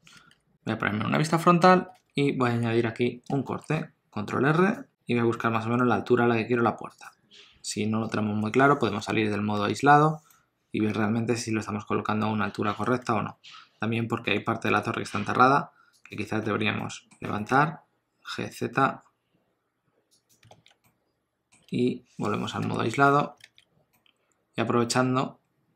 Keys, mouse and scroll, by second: 0.1 scroll down 3, 0.3 Tab, 2.0 alt+a, 3.5 ctrl+r, 9.6 KP_Divide, 10.3 middle click, 13.0 alt+z, 14.6 2, 16.0 alt+click, 16.5 alt+z, 16.8 middle click, 17.3 g, 20.5 alt+z, 20.8 middle click, 21.7 Tab, 23.1 scroll down 2, 23.4 alt+z, 23.9 middle click.